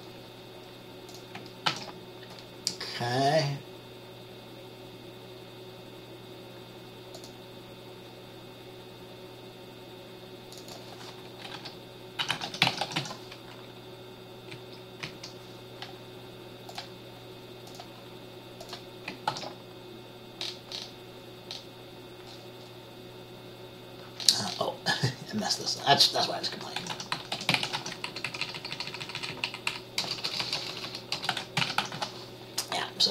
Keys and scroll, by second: 1.8 ctrl+s, 11.7-13.1 typing, 14.7 Left, 15.2 Up, 19.5 ctrl+s, 27.0-27.9 typing, 28.2 Right, 28.4 Right, 28.6 Right, 28.7 Right, 29.8 Right, 30.2-32.1 typing.